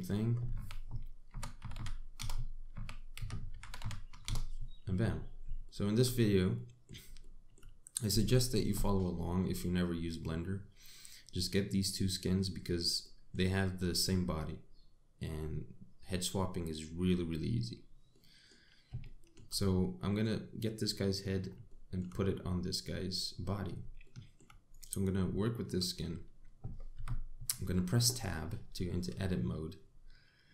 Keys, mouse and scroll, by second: 0.4 click, 1.2 r, 3.4 r, 5.8 scroll up 2, 6.3 shift+middle click, 7.2 middle click, 7.8 shift+middle click, 8.5-8.9 scroll down 1, 13.7 middle click, 18.8 middle click, 19.7 shift+middle click, 20.5 middle click, 22.3 shift+middle click, 24.7 shift+middle click, 25.4 click, 26.0 shift+middle click, 26.6 scroll up 3, 27.6 Tab.